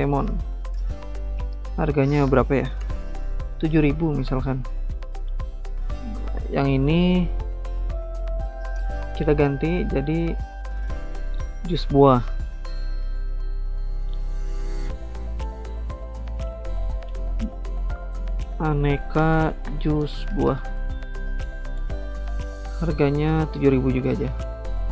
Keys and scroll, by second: 0.0-1.4 typing, 2.8-6.9 typing, 14.8 space, 17.4-22.0 typing, 18.2 ctrl+a, 23.5-24.9 typing.